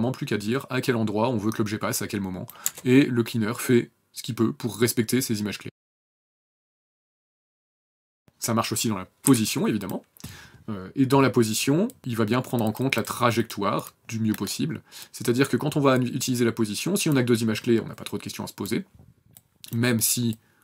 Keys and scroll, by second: 0.9 KP_0, 3.9 KP_0, 4.9 Delete, 5.3 KP_0, 8.2 p.